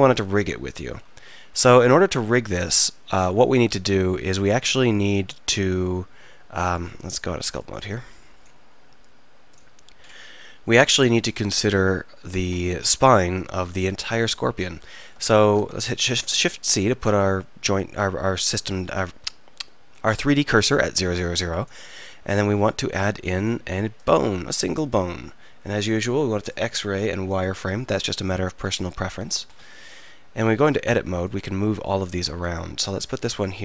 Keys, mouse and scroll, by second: 5.7 Tab, 13.0 KP_1, 14.0 KP_3, 15.5 shift+c, 29.5-30.5 drag, 30.5 Tab, 30.5-32.6 right drag, 32.6-33.6 drag.